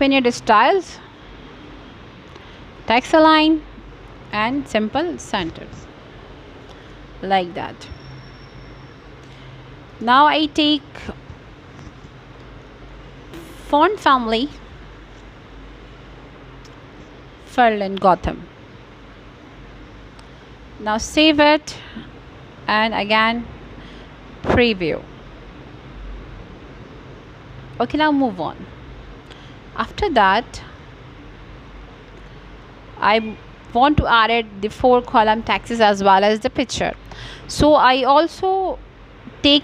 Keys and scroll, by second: 2.4 f.